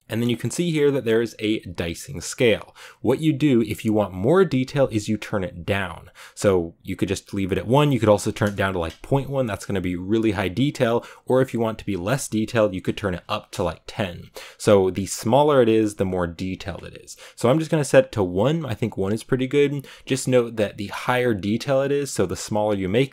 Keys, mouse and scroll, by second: 0.0-6.9 shift+middle drag, 6.9 click, 8.6-13.6 drag, 18.5 click.